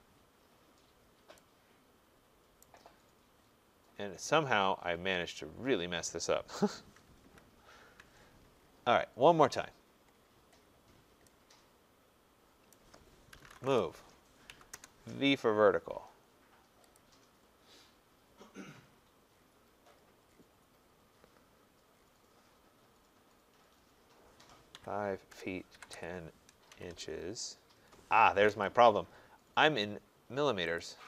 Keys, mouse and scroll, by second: 2.6 right click, 2.9-4.2 scroll, 4.2-5.0 scroll, 5.0-5.4 scroll, 7.2 ctrl+z, 8.5-9.1 scroll, 9.2 middle click, 9.2 middle click, 9.3-10.1 middle click, 9.6 middle click, 10.5 middle click, 12.7 right click, 12.9-13.4 scroll, 13.1-14.8 typing, 17.0 click, 18.8-19.6 scroll, 19.9-20.6 scroll, 21.1-21.5 scroll, 21.9 scroll, 24.7 5, 26.5 typing, 28.5 Escape, 30.8 click.